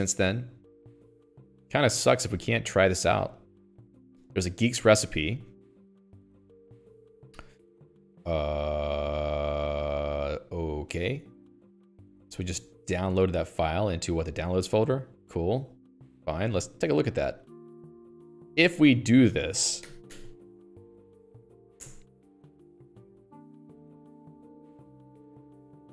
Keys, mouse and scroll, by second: 15.9-16.5 scroll up 10, 16.5 Escape, 16.5 click, 18.0 q, 18.4 Escape, 19.0 ctrl+f, 20.2 alt+h, 20.5 alt+h, 21.0 shift+d, 21.4 Tab, 21.8 u, 22.2 Return, 24.0-25.9 l.